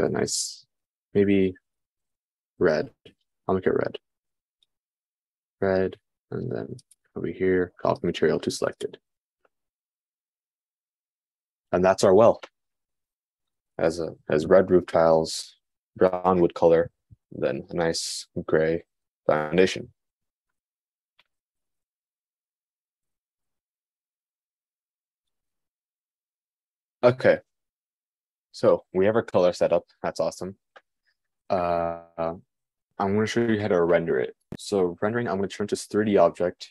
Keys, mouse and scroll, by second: 7.4-9.2 drag, 9.2-36.7 middle drag.